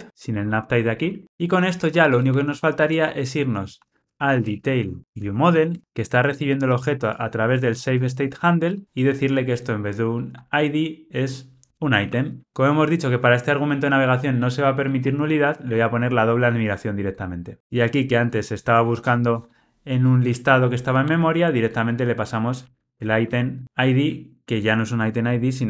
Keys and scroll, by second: 0.3 alt+shift+Left, 12.4 super+z.